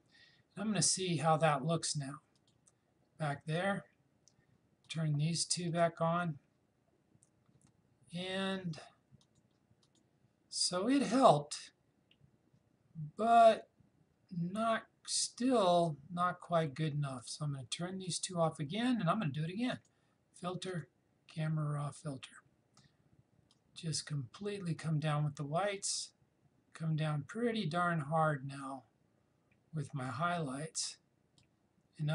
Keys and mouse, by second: 2.4 click, 4.9 click, 9.2 click, 17.2-32.1 drag.